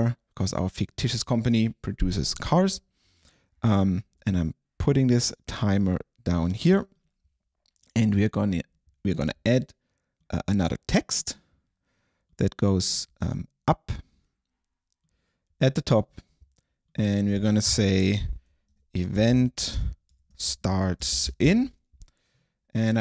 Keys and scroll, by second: 18.6-22.0 typing.